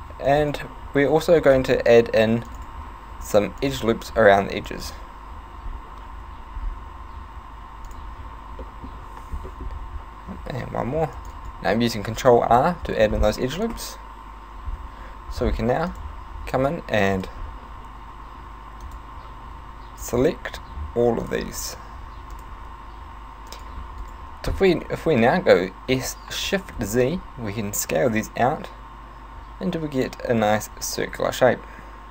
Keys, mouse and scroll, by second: 8.6 middle click, 9.5 shift+middle click, 10.7 ctrl+r, 11.5 right click, 12.6 middle click, 13.8 KP_7, 14.8 c, 24.2 right click, 25.9 s.